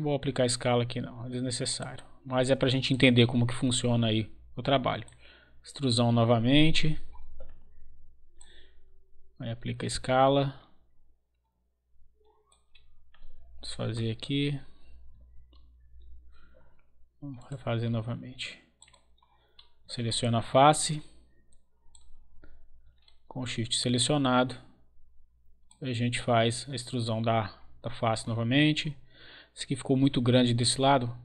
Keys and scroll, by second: 15.6 ctrl+z.